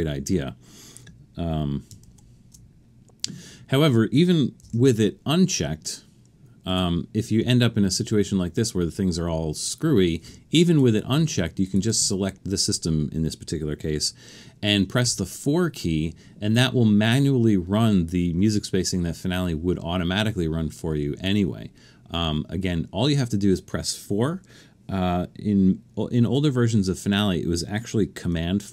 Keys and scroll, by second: 2.0 shift+super+z, 4.7 super+,, 7.5 Escape, 15.1 4.